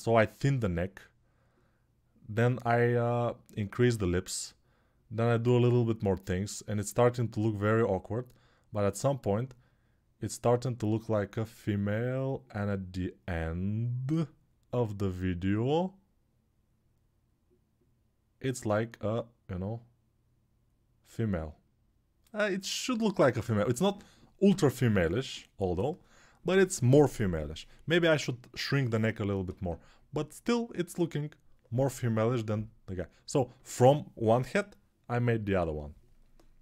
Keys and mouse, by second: 16.1-36.6 middle drag, 16.5 click.